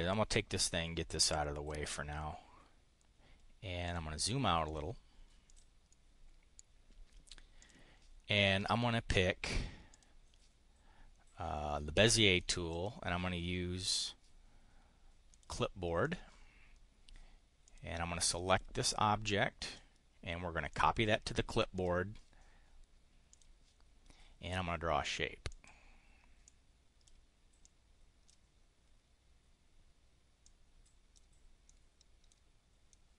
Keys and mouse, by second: 0.1-1.2 drag, 1.7 click, 6.0-7.0 drag, 7.5 click, 9.9 click, 12.7 click, 15.4 click, 16.0 click, 17.7 click, 18.4 click, 19.6 click, 20.7 click, 21.7 click, 23.3 click, 25.5 click, 26.5 click, 27.5 click, 30.4 click, 31.5 click, 32.8 click.